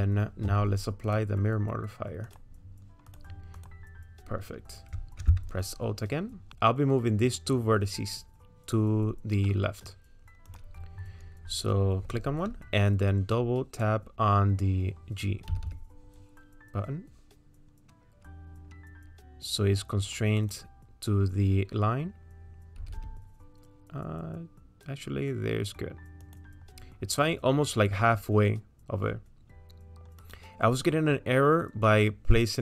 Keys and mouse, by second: 1.1-2.4 drag, 3.1 click, 5.2 Tab, 9.5 click, 9.5 right click, 10.5 click, 15.5 g, 22.8 g, 30.2 click.